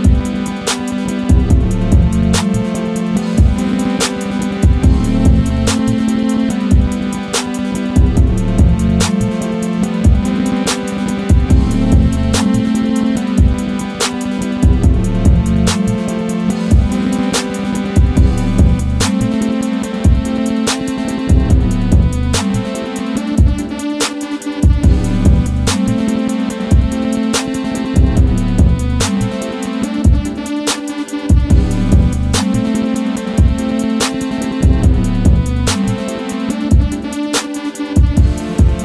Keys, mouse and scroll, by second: 2.2 right click, 2.7 click, 3.2-3.6 scroll down 1, 3.6 scroll up 1, 5.5 ctrl+click, 9.7-14.6 drag, 14.6 right click, 15.4 click, 21.2-26.5 drag, 26.5 click, 27.3 ctrl+z, 27.8-34.8 drag, 34.8-38.8 drag.